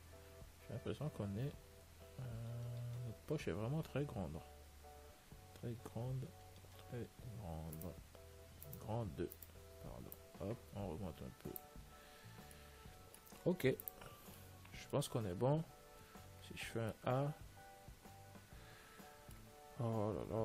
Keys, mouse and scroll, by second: 0.3-8.0 middle drag, 8.0-11.3 right drag, 10.5 click, 12.3 a, 12.4 Tab, 12.6-15.8 middle drag, 14.0 ctrl+s, 16.3 a, 18.8 middle click, 19.9-20.4 scroll up 1.